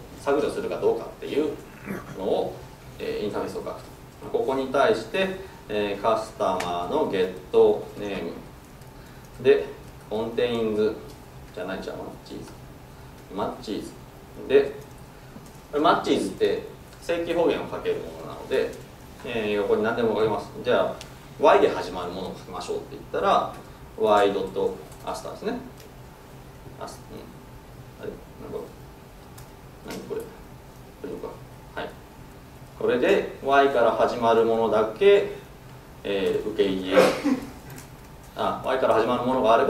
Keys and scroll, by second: 6.6 Tab.